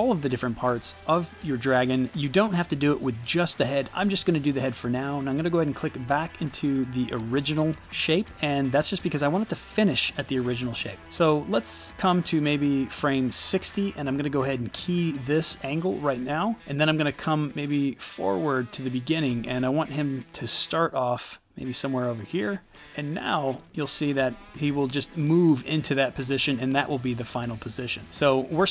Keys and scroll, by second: 23.9 space, 26.8 space.